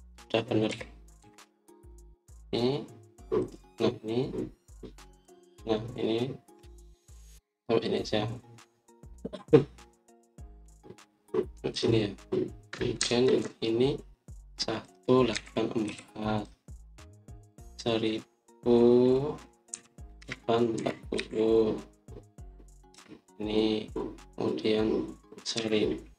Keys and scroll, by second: 1.6-2.1 typing, 13.9 Escape, 14.2 Escape, 16.2-16.8 typing, 20.4-22.1 typing, 23.8 Return.